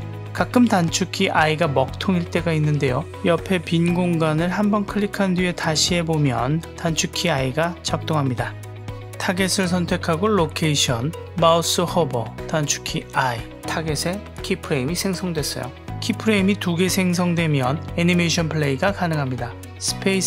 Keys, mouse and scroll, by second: 10.0 click, 19.2 space.